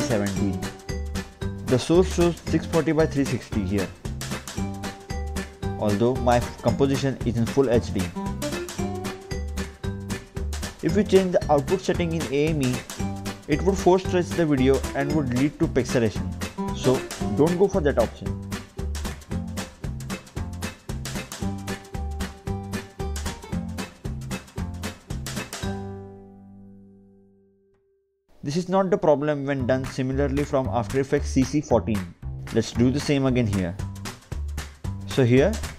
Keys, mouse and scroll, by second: 4.5 click, 5.3 ctrl+k, 8.8 click, 14.1 click, 15.7-17.3 typing, 16.7 click, 17.5 click, 21.0 click, 22.4 click, 23.2 Delete, 24.0 Return, 25.4 Return, 26.6 click, 27.9 click, 30.7 click, 32.0 click, 33.1 click.